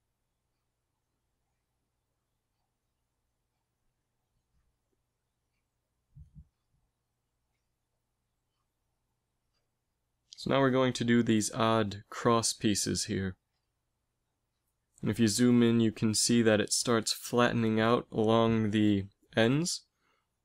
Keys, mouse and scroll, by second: 0.6 z, 3.0 Tab, 3.3 a.